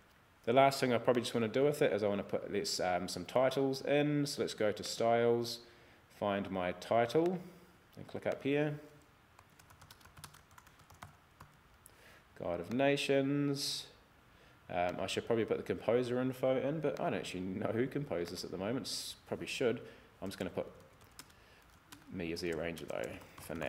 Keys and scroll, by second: 9.3-11.4 typing, 20.4-23.6 typing.